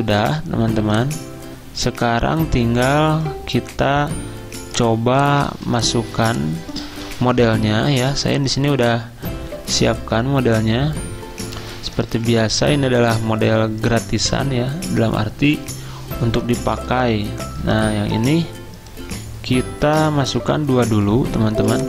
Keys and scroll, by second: 5.4 z, 21.5 z.